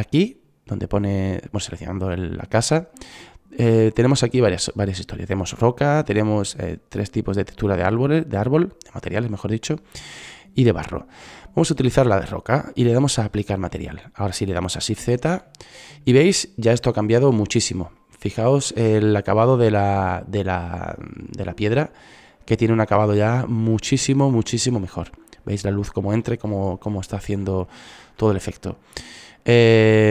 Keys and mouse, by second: 1.8-3.6 drag, 11.9-13.6 drag, 13.7 shift+z, 21.4 middle click, 24.3 click.